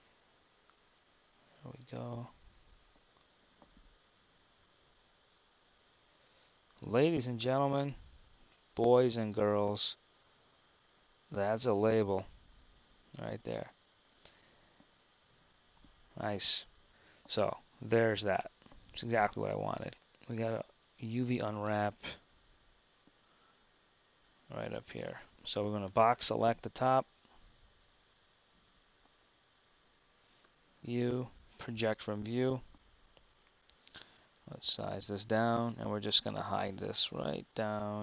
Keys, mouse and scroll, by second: 5.0 Tab, 16.1 Tab, 22.3 Tab, 23.5 KP_1.